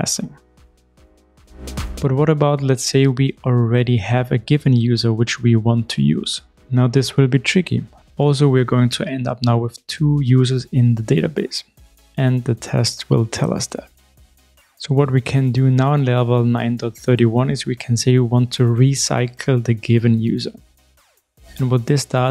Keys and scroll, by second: 1.2 shift+super+F12, 4.3 super+v, 12.5 ctrl+shift+r, 17.3 shift+super+F12, 21.9 Return.